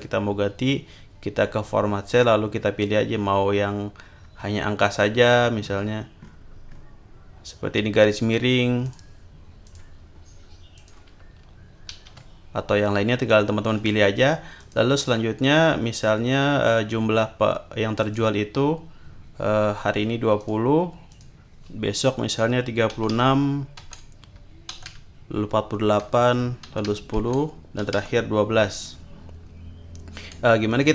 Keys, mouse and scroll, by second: 0.0 click, 4.2 scroll down 2, 5.6 scroll up 2, 6.2-7.0 scroll up 4, 8.8 click, 9.6 click, 10.7 click, 11.9 ctrl+z, 14.6 click, 15.4 click, 18.0 click, 20.4 click, 21.1 click, 22.7-25.3 typing, 23.8 Tab, 26.0 Tab, 26.4-28.4 typing, 30.7 click.